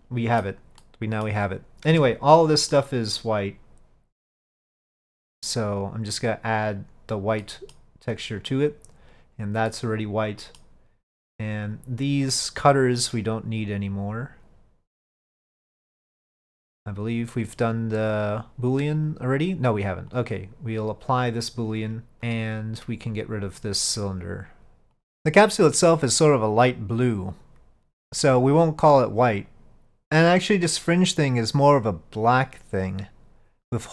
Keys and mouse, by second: 0.9 middle click, 2.0 Tab, 2.8-3.3 middle drag, 4.7-6.9 drag, 7.5-7.8 middle drag, 8.5 click, 9.8 middle click, 14.0 click, 17.0-19.2 drag, 20.2-23.8 drag.